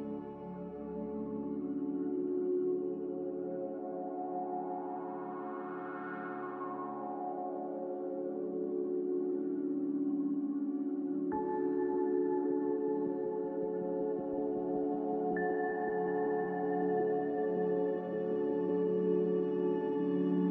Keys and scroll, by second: 3.4-3.7 typing, 3.7 Return, 6.5-7.2 typing, 9.3 typing, 9.4 Return, 12.3 z.